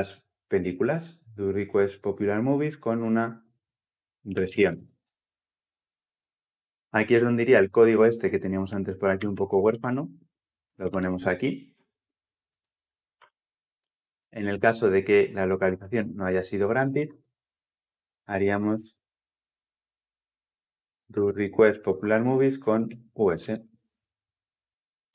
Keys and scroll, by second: 0.4 alt+Return, 4.9 Return, 6.0 Return, 6.3 ctrl+z, 9.0 ctrl+x, 11.3 ctrl+v, 21.7 Return.